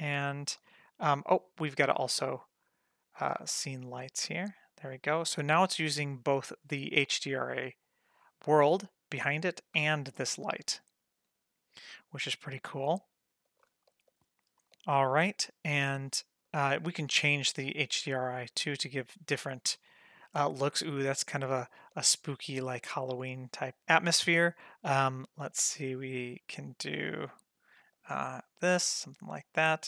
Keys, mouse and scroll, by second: 0.2-0.7 scroll up 2, 0.7 middle drag, 2.1-3.9 drag, 4.2 g, 6.7-9.8 drag, 10.7 g, 13.3 scroll up 2, 13.5 shift+middle click, 13.8 scroll down 1, 14.0-15.7 middle drag, 16.4-19.0 drag, 20.7-21.1 middle drag, 21.1-21.8 scroll up 3, 21.6 shift+middle drag, 21.9-22.4 middle drag, 22.6 scroll down 1, 22.8 shift+middle drag, 23.3 middle click, 24.8-28.7 drag, 29.0-29.3 scroll down 1, 29.3 scroll up 1, 29.7 shift+middle click.